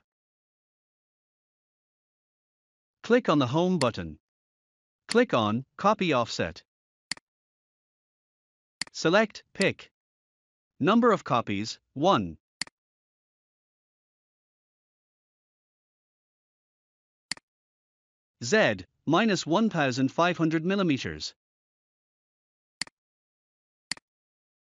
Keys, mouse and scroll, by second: 3.7 click, 7.0 click, 8.7 click, 11.2 1, 12.5 click, 13.9 typing, 17.2 click, 19.2 typing, 22.5 typing, 22.7 click.